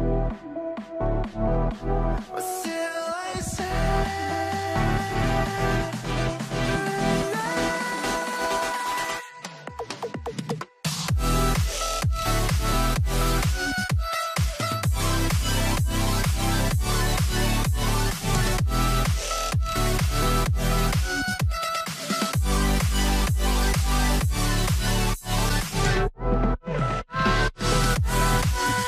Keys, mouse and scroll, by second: 4.2 alt+middle click, 5.0 alt+middle click, 5.0 scroll up 1, 6.6 alt+middle click, 7.4 middle click, 8.2 ctrl+click, 8.4 alt+q, 9.0-10.9 typing, 14.4 w, 16.5 alt+middle click, 25.2 m, 27.3 double click.